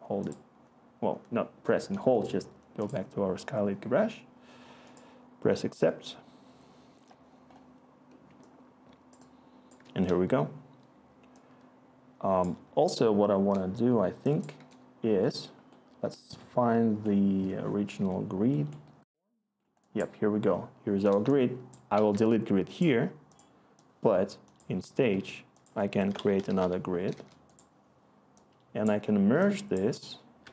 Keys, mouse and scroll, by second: 14.6 Return, 18.6 Escape, 21.9 Delete, 25.9 Tab, 25.9-27.1 typing, 27.1 Return.